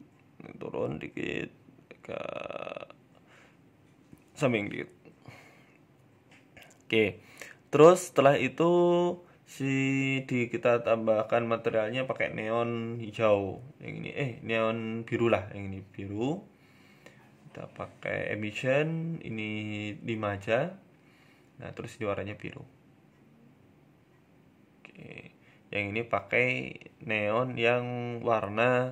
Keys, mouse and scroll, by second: 1.5 middle click, 1.8-2.4 scroll down 2, 2.5 KP_1, 3.5 g, 5.7 Tab, 6.1 Tab, 6.6 g, 7.3 middle click, 8.6 right click, 9.3 click, 9.7 click, 10.5 click, 12.7 BackSpace, 16.1 click, 19.0 click, 20.9 click, 24.8 right click, 26.2 shift+right click, 26.8 ctrl+l, 28.5 right click.